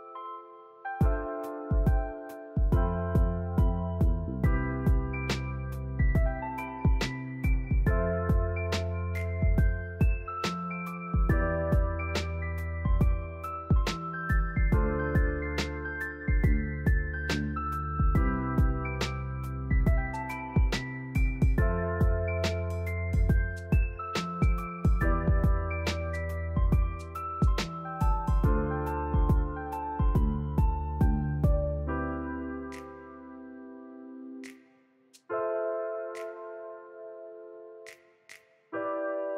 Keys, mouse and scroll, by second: 0.4 scroll up 2, 0.6 shift+middle click, 1.2 shift+middle drag, 1.4-1.8 scroll up 1, 1.8 alt+click, 2.6 click, 3.3 s, 8.6 middle click, 8.9 scroll down 5, 9.0-10.1 middle drag, 10.1 shift+middle click, 10.3-10.8 scroll up 1, 10.8 KP_3, 11.1 shift+middle click, 11.4 ctrl+z, 12.0 shift+middle click, 12.5 s, 14.2 ., 15.3 s, 17.2 middle drag, 17.5 scroll up 2, 18.2-18.6 drag, 18.9 shift+click, 19.2 middle drag, 19.5 scroll up 2, 20.4-21.3 shift+middle drag, 21.3 click, 22.0 KP_3, 22.6 g, 24.3-24.7 middle drag, 24.7 click, 25.0 KP_3, 25.5 g, 27.2 click, 27.5-28.2 middle drag, 28.2 KP_3, 28.8 g, 30.3 click, 30.5 scroll down 6, 30.8-31.5 shift+middle drag, 31.5 Tab, 31.6 drag, 31.8-32.8 middle drag, 34.6 KP_3, 35.5 click, 35.8 scroll up 2, 36.2 click, 37.5 click, 37.9 click, 38.1 click, 38.5 Tab, 38.8 shift+middle click.